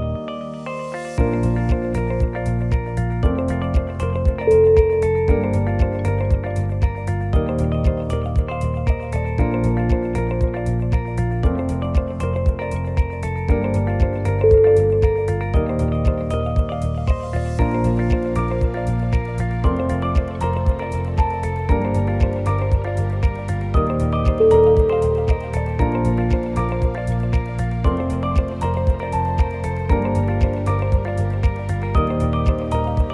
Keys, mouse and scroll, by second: 0.6 shift+click, 1.8 e, 3.0 shift+middle click, 5.0 scroll up 1, 5.9 click, 6.3 shift+middle click, 7.7 alt+click, 7.8 middle click, 9.2 scroll down 3, 9.4 middle click, 10.3 scroll up 2, 10.7 shift+click, 11.5 KP_1, 12.1 shift+middle click, 12.3 o, 12.3 g, 15.6 middle click, 16.1 middle click, 19.3 click, 20.5 g, 24.7 ctrl+z, 24.9 click, 25.2 shift+click, 25.7 g, 28.6-31.9 shift+click, 32.1 e.